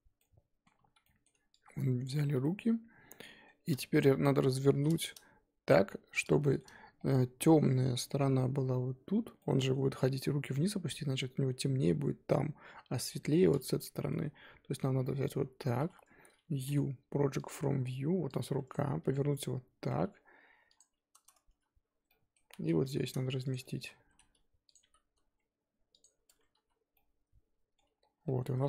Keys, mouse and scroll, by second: 0.2-2.0 middle drag, 2.0 ctrl+click, 2.4 z, 2.6-3.2 scroll down 1, 3.4 middle click, 4.0 shift+click, 4.7 ctrl+z, 5.0 shift+click, 5.7-6.7 middle drag, 6.7-7.0 scroll down 5, 7.0 middle click, 7.7-9.4 scroll up 1, 9.4-15.0 middle drag, 15.0 KP_7, 17.4 u, 18.7 click, 19.0 r, 21.5 a, 22.4 ctrl+z, 22.8 g, 24.1 s, 24.8 g, 26.3 Tab, 26.6 z, 26.9-28.0 middle drag, 28.0 scroll down 1, 28.2-28.6 middle drag.